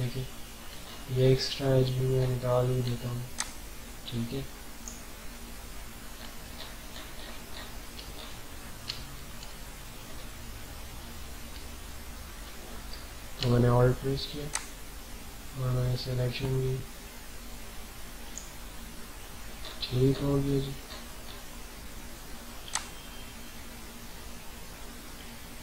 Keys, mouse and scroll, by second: 0.7 alt+scroll up 1, 2.1 scroll up 1, 3.3-5.6 alt+drag, 5.6-5.9 alt+scroll down 3, 6.7 ctrl+scroll up 1, 7.5 ctrl+scroll up 1, 8.0 typing, 8.1 scroll up 2, 8.9-9.5 alt+scroll down 2, 9.8 scroll down 1, 11.6 alt+scroll down 1, 11.6-12.1 typing, 14.5-19.5 alt+drag, 19.5 alt+scroll up 1, 20.8 scroll up 1, 21.6 typing, 22.7-25.6 alt+drag.